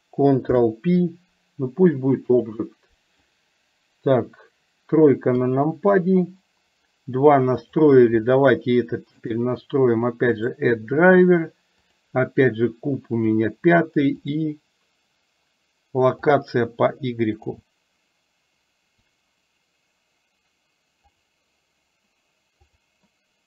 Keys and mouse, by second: 0.5 ctrl+p, 5.4 KP_3, 7.7 click.